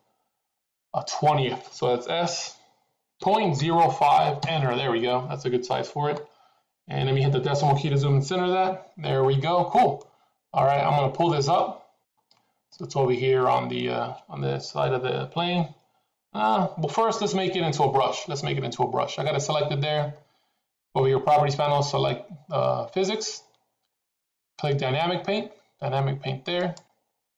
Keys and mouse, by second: 2.1 s, 8.4 KP_Decimal, 9.9-12.0 middle drag, 26.6 click.